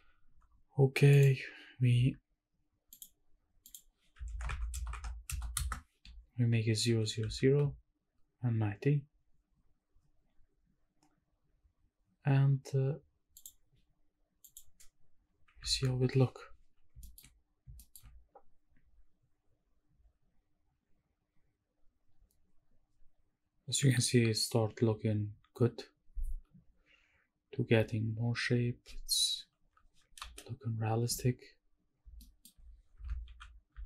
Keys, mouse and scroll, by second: 1.1 click, 2.9 click, 3.6-5.6 drag, 6.9 g, 7.2 z, 13.4 shift+click, 14.8 click, 15.7 ctrl+s, 17.0 shift+middle click, 17.4 scroll up 1, 17.7 shift+middle click, 18.1-18.5 scroll down 1, 28.1 w, 30.2 ctrl+space, 31.3 scroll down 1, 32.2 shift+middle click, 33.0 shift+`.